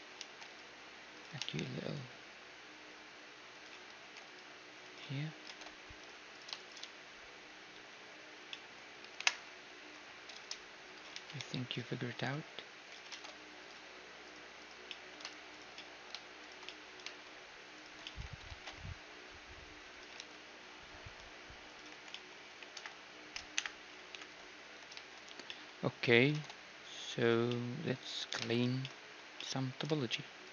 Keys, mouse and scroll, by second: 0.2 ctrl+r, 1.4 ctrl+r, 3.9 ctrl+r, 5.1 z, 5.5 ctrl+Tab, 6.4-8.5 right drag, 6.9 z, 7.8 z, 8.2-10.9 middle drag, 9.2 KP_Decimal, 9.9 i, 11.2 e, 13.2 ctrl+Tab, 14.3-16.4 right drag, 14.9-20.2 middle drag, 16.4-19.9 drag, 18.5 ctrl+b, 20.2 t, 21.1-23.6 drag, 21.9 t, 22.2-24.2 middle drag, 22.8 KP_1, 23.6 KP_1, 24.2 ctrl+KP_3, 24.7-25.9 middle drag, 25.1 a, 26.4 ctrl+Tab, 28.4-30.4 right drag.